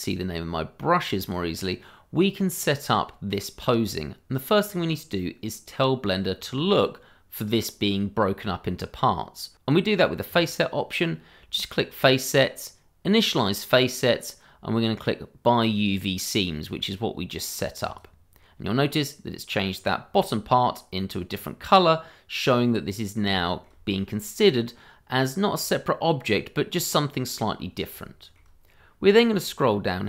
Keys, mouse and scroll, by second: 4.4-4.7 scroll down 1, 4.7-6.3 scroll up 1, 6.3-8.4 scroll down 1, 10.3 click, 17.8 click, 18.7-19.3 scroll up 1, 19.3 middle click, 19.6-20.1 scroll up 1, 21.2 scroll down 1, 21.6 middle click, 23.5 shift+middle click, 24.1 middle click, 26.7 middle click, 28.2 shift+middle click, 29.4-30.0 scroll down 1.